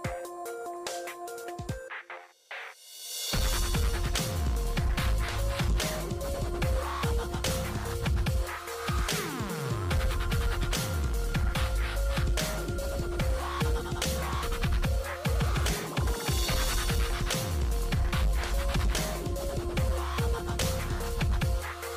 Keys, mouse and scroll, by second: 0.6-3.1 typing, 1.6 Tab, 4.7 click, 6.3-8.6 middle drag, 8.6 click, 10.7 e, 11.8 click, 19.3 click.